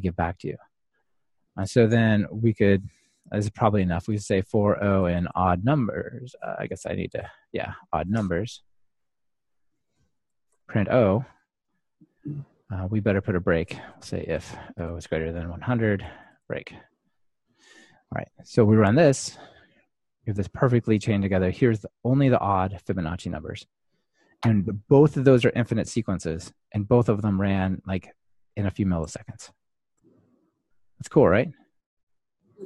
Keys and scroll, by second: 7.2 Escape, 9.4 Escape, 10.2 Return, 13.0 Escape, 19.4 ctrl+r.